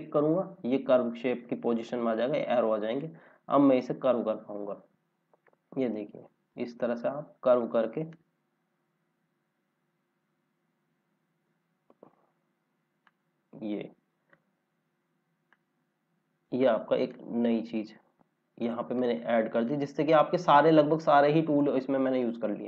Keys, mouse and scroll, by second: 1.8 click, 17.4 scroll down 1, 18.6 click, 20.5 click, 21.4 right click, 22.2 click, 22.4 scroll down 1.